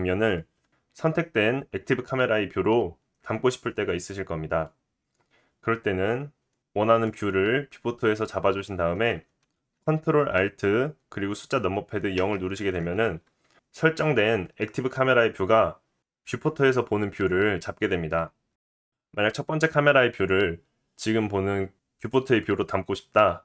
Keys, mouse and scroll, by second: 5.7-6.6 scroll down 2, 6.6-7.0 scroll down 1, 12.2 ctrl+alt+KP_0.